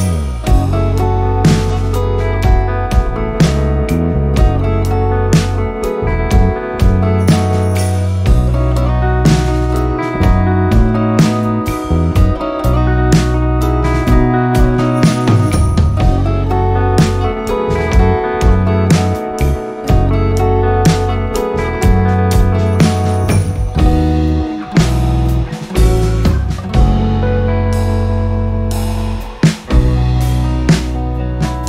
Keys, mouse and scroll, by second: 0.2 ctrl+scroll up 1, 0.5 b, 0.9 p, 1.3 click, 3.3 click, 4.2 click, 6.5-23.8 drag, 23.8-31.2 drag, 31.2-31.6 drag.